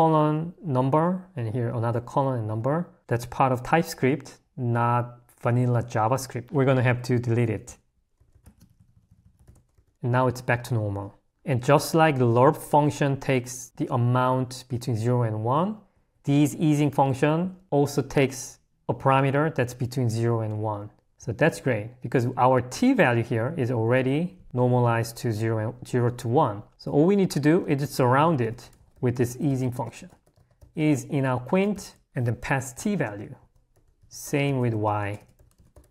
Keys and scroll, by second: 0.7 l, 2.6 h, 7.4 d, 8.1 h, 9.3 d, 9.7 h, 9.9 Escape, 11.3 k, 15.9 h, 23.7 l, 27.3 a, 33.7 h, 33.9 i.